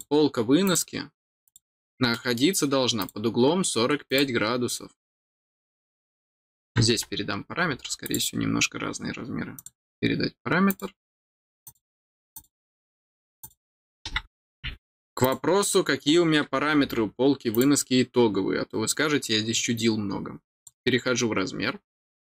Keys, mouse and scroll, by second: 0.6 click, 1.4 click, 2.1 middle click, 2.9 click, 4.0 click, 8.0 click, 9.5 click, 10.6 click, 11.6 click, 12.3 click, 13.4 click, 15.2 click, 17.5 click, 20.5 click.